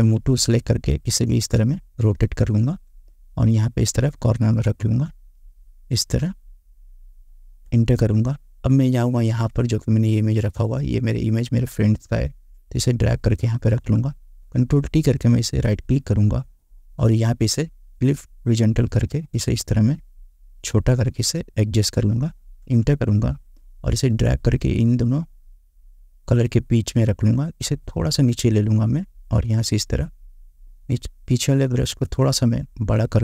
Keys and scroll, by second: 1.0 ctrl+t, 7.8 Return, 14.6 ctrl+t, 22.8 Return, 31.9 ctrl+t.